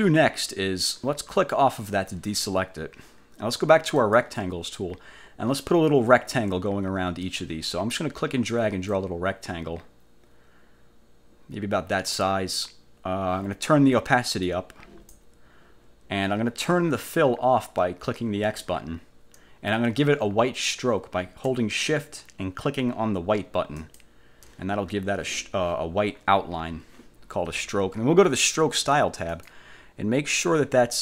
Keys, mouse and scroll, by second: 1.9 click, 4.1 click, 9.0-12.4 drag, 14.5 click, 18.6 click, 23.9 shift+click, 29.4 click.